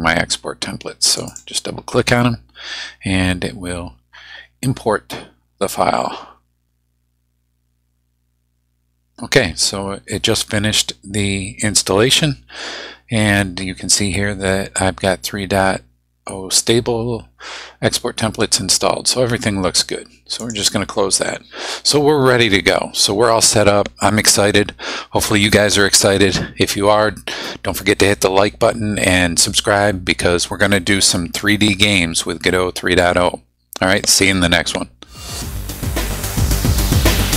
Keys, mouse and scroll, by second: 1.1 click, 20.4 click.